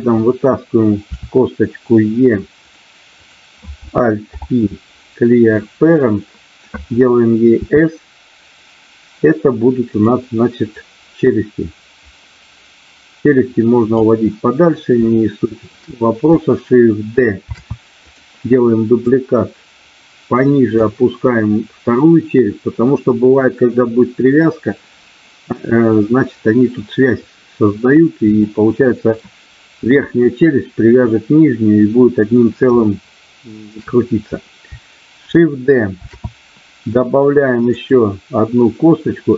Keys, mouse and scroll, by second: 1.1 e, 4.4 alt+p, 7.6 s, 10.7-13.9 drag, 15.0 shift+middle click, 17.5 shift+d, 18.1 click, 19.1-20.7 drag, 28.4 shift+middle click, 32.9 shift+middle click, 36.0 shift+d, 37.7 click.